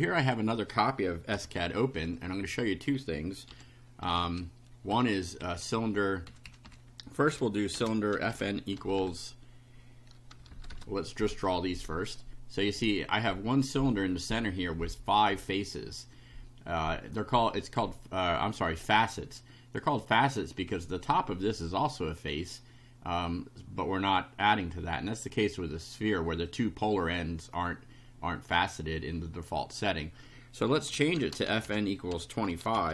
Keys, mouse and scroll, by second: 0.2 click, 1.4 ;, 2.0 Home, 2.5 Right, 3.0 Delete, 3.5 y, 4.0 Down, 4.9 Up, 5.4 Down, 6.3 Up, 7.5-8.9 typing, 10.4 BackSpace, 11.3 F5, 12.6-13.3 scroll up 4, 26.5-28.6 drag, 30.9-32.9 typing.